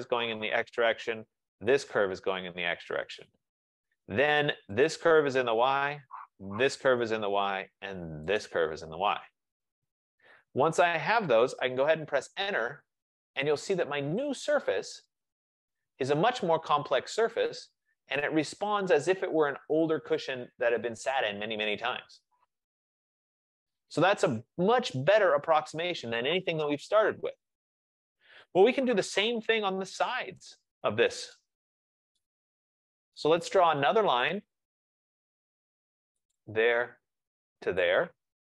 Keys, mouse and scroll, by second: 0.1 shift+click, 2.0-5.1 shift+drag, 6.9 shift+click, 8.5 shift+click, 12.1 Return, 14.6 click, 17.6-19.7 drag, 25.5-30.8 right drag, 28.3 F15, 31.4 right click, 31.8 middle click, 31.8 middle click, 31.9 middle click, 33.5 right click, 34.4 click, 36.5 click, 37.9 click.